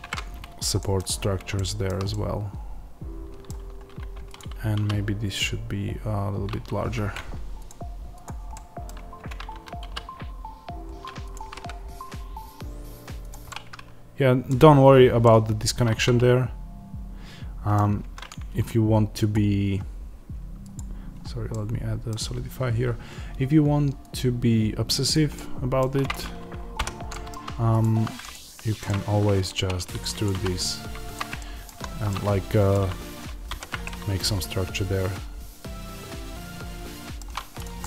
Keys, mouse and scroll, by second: 0.0-4.3 middle drag, 1.0-1.5 scroll down 1, 3.9 Tab, 4.3 click, 4.7 s, 6.8 Escape, 8.4-10.7 middle drag, 8.9 Tab, 9.4 a, 11.2 click, 11.3 g, 13.2 click, 13.4-20.6 middle drag, 17.9 Tab, 20.6 click, 21.4-24.0 middle drag, 24.0-25.3 drag, 25.3 middle click, 25.9 click, 26.7 h, 27.0 middle click, 27.9 Tab, 28.1 click, 28.8-30.2 middle drag, 29.5 e, 30.2 click, 30.3 s, 31.1 click, 31.3-37.5 middle drag, 31.6 Tab, 33.4 alt+h, 37.5 click, 37.7-37.8 middle drag.